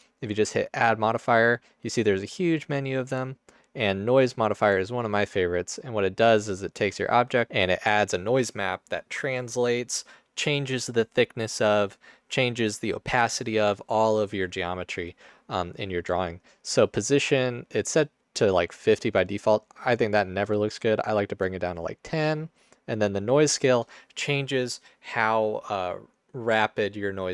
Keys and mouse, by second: 6.3 space, 7.6 space, 17.4-19.3 drag, 20.1-21.6 drag, 21.6 middle click.